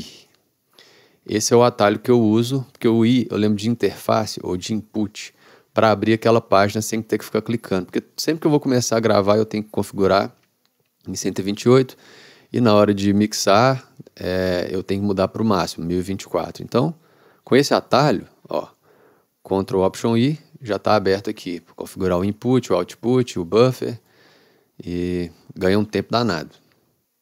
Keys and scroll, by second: 0.0 ctrl+alt+i, 20.1 ctrl+alt+i.